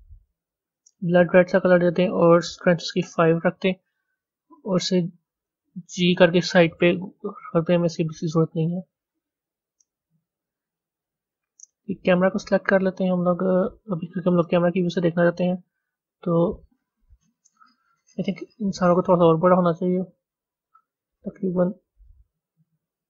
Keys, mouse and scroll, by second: 3.0-5.3 drag, 5.4 g, 11.7 click, 15.4 KP_0, 19.1 click, 20.1 s.